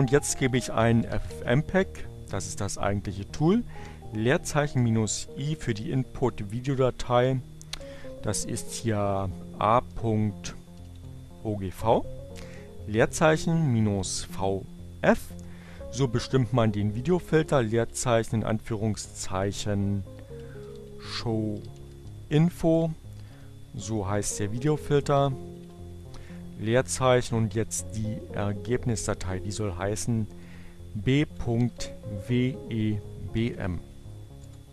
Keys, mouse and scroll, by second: 0.2-1.6 typing, 3.2 i, 6.0 space, 8.4 a, 8.7 o, 10.0 g, 11.0 space, 11.2 -, 13.4-14.2 typing, 16.2 space, 16.4 shift+2, 18.4-19.5 typing, 21.1-26.2 typing, 28.5-29.5 typing, 31.0-32.3 typing, 34.0 Return.